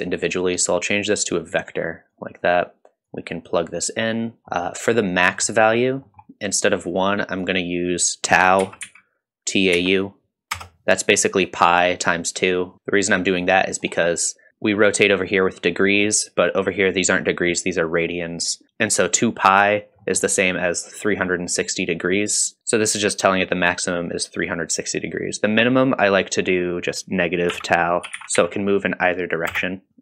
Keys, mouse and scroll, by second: 0.3-1.7 drag, 2.1 click, 3.1-4.3 drag, 4.4 middle click, 5.2-5.7 scroll up 2, 5.5 middle click, 6.1 middle click, 6.8-11.2 drag, 12.7 middle click, 13.0-13.4 drag, 13.6 middle click, 14.5 middle click, 15.8 middle click, 20.0 middle click, 25.7-29.9 drag, 29.9 middle click, 29.9 scroll down 1.